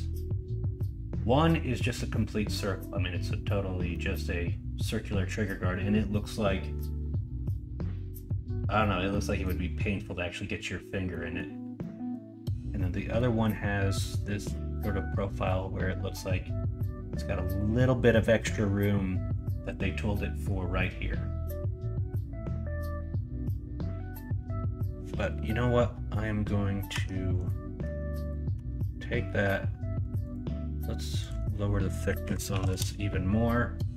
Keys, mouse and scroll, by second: 13.1 middle click, 13.9 middle click, 27.8 Tab, 28.5 Tab, 31.6-33.9 drag.